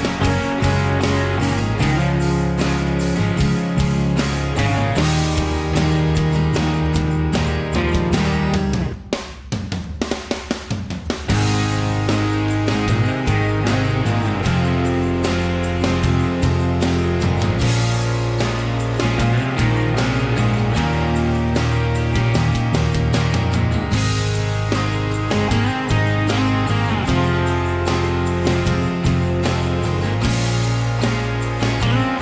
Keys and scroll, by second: 2.7 i, 4.1 Escape, 8.1 p, 8.2 Escape, 10.8 b, 13.7 Escape, 13.9 Escape, 20.5 ctrl+h, 23.3 ctrl+h, 24.0 ctrl+z, 30.8 ctrl+g, 30.9 ctrl+h, 31.8 ctrl+z.